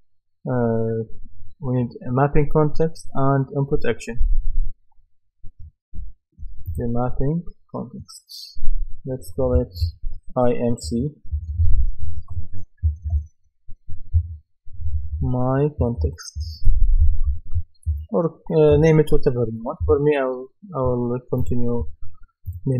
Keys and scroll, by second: 10.8 shift+i, 11.3 shift+m, 12.0 shift+c, 14.8-18.4 typing, 19.8 Return.